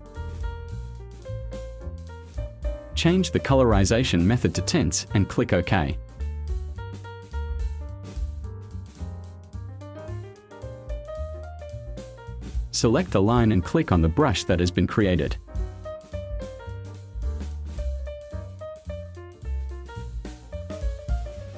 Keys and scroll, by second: 20.1 space.